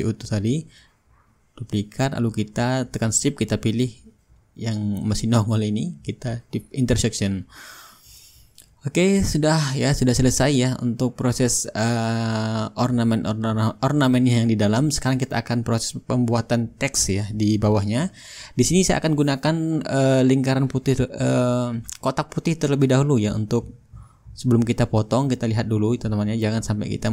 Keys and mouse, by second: 0.8-5.5 right drag, 5.6-11.5 drag, 7.4 shift+right click, 8.4-11.5 shift+right drag, 12.3-14.1 middle drag, 14.6-16.4 drag, 16.6-18.9 drag, 19.4-24.6 drag, 24.7-25.8 drag, 26.0-27.1 drag, 26.7-27.1 shift+right drag.